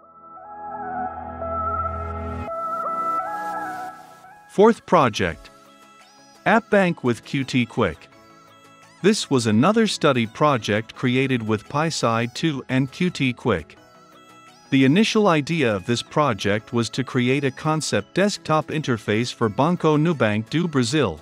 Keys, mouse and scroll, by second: 7.4-21.2 drag.